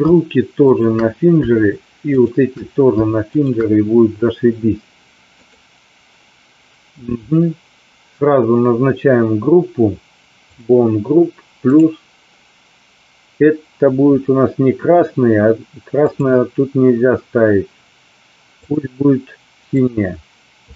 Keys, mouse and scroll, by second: 2.3 shift+click, 3.3-3.6 shift+drag, 5.3 click, 10.5 click, 11.7 click, 16.1-18.8 drag, 19.8 click.